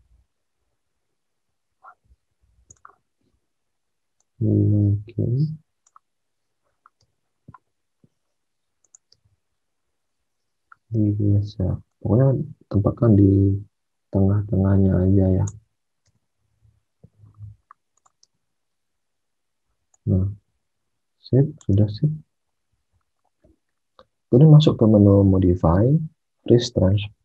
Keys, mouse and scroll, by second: 6.9 space, 9.0 space, 15.9 space, 18.2 space, 21.7 alt+Tab.